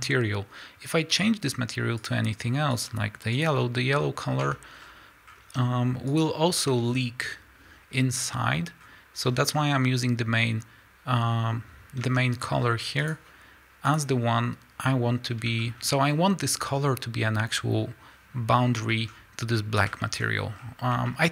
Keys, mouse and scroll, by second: 2.7 click, 3.4 click, 4.6 Tab, 4.8 scroll down 1, 5.3 scroll up 1, 5.6 Tab, 6.4 click, 6.9 scroll down 1, 8.2 scroll up 1, 9.2 scroll down 1, 10.4 scroll up 1, 12.2 Tab, 13.0 click, 15.6-21.3 shift+middle drag, 18.7 scroll down 1, 19.1 scroll up 1, 20.2 scroll up 1, 20.6-21.1 scroll down 1.